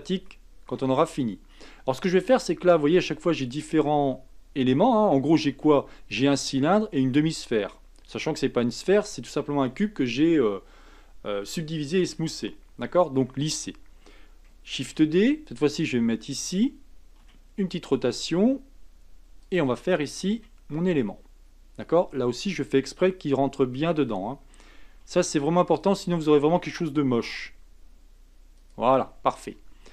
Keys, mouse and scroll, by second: 0.3 shift+middle click, 0.7 shift+scroll up 1, 0.9 scroll down 2, 1.5-1.9 scroll down 2, 1.9 shift+middle click, 2.4-3.9 shift+scroll up 1, 14.8 shift+d, 17.2 r, 20.3 g, 23.4-24.9 scroll up 4, 24.9 r, 27.2 g, 29.0-29.9 scroll down 3.